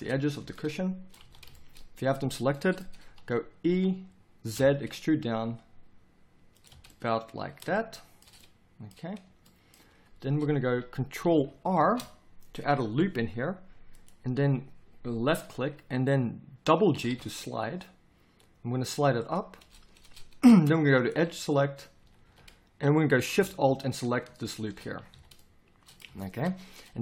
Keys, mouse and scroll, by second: 0.4 z, 1.2 z, 3.7 e, 6.7 z, 10.7 a, 11.7 ctrl+r, 22.0 a, 22.2 a, 25.1 z.